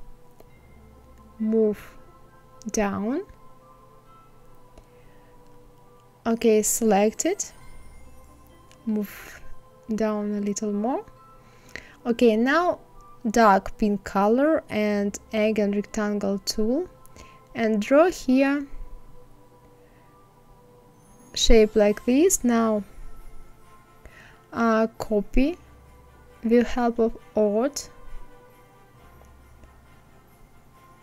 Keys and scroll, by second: 0.2 Down, 6.9 Down.